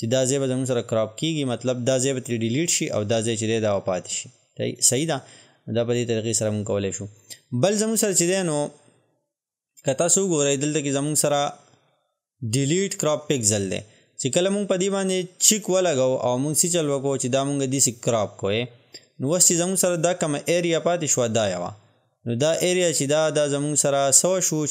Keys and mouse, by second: 11.0 click, 15.6-24.7 drag.